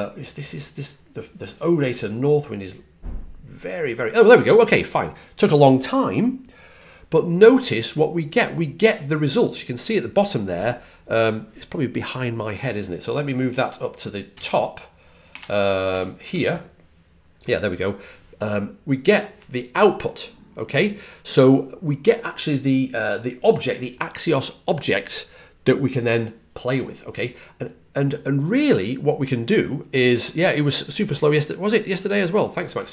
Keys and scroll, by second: 14.2 shift+super+Right, 15.7 ctrl+super+Right.